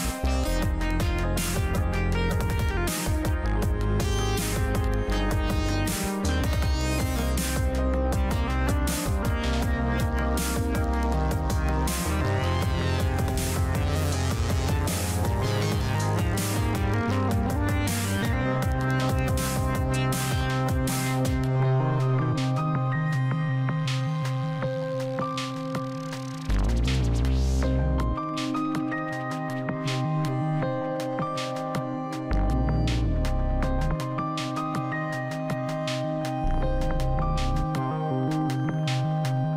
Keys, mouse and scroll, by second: 2.8 scroll up 1, 3.4-4.0 scroll down 1, 6.7 click, 9.7 click, 20.8-21.6 scroll up 1, 21.6 middle click, 22.6 scroll down 1, 23.9 click, 37.9 scroll down 1, 39.0-39.5 middle drag.